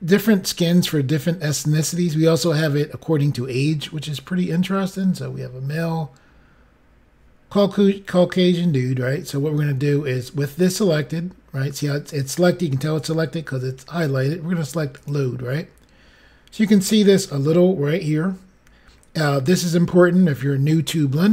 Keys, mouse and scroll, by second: 1.1-1.6 scroll down 2, 3.9-4.6 scroll down 5, 14.9 click.